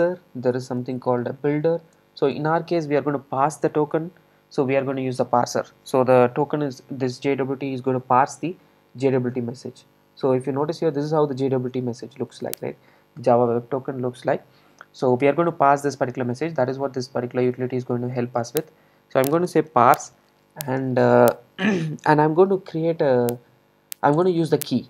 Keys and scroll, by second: 0.6 Return, 24.2 Return.